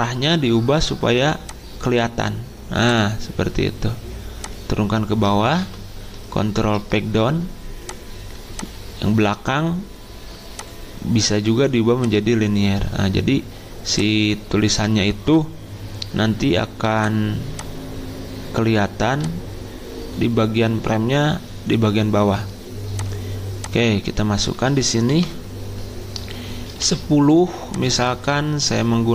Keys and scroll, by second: 5.6 ctrl+Page_Down, 24.8-25.7 typing, 26.8 ctrl+a.